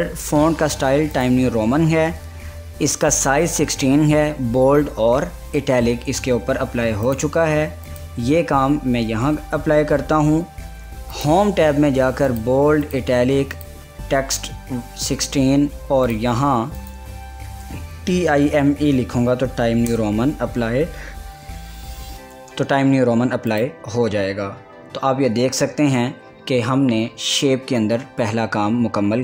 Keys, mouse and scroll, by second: 1.3 click, 2.8 typing, 7.3 click, 7.3 typing, 8.3 click, 9.7 ctrl+a, 11.2 click, 14.7-15.5 typing, 16.2 click, 17.7-18.5 typing, 19.9 Return, 23.6 click.